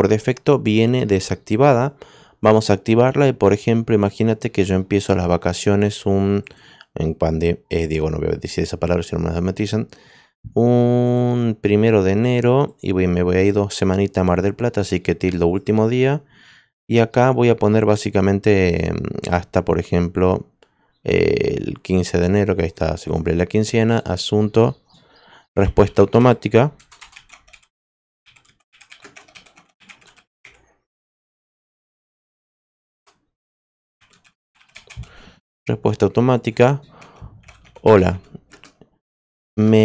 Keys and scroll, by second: 25.8-35.1 typing, 37.1-39.8 typing.